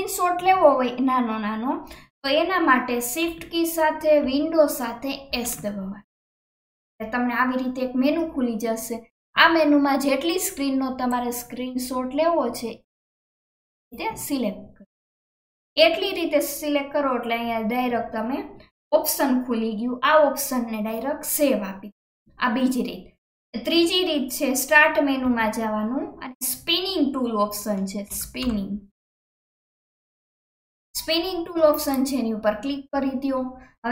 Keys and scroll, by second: 5.3 shift+super+s, 25.2 shift+super+s.